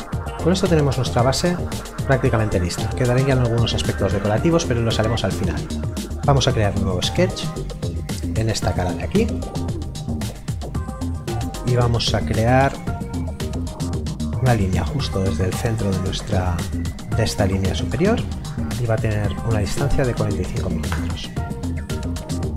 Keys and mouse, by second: 0.3 middle click, 5.9 middle click, 6.8 click, 14.3 click, 17.8 click, 19.8 KP_4, 19.9 KP_5, 20.9 Return.